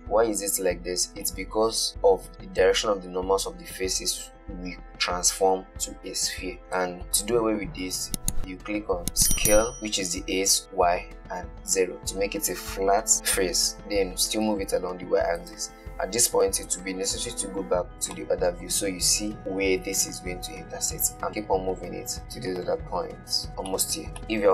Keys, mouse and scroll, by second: 1.6-2.9 middle drag, 6.7-9.0 middle drag, 9.7 s, 14.4 g, 17.6 /, 18.4 middle click, 19.2 scroll up 2, 19.4-20.9 shift+middle drag, 20.9 g, 24.0-24.5 middle drag.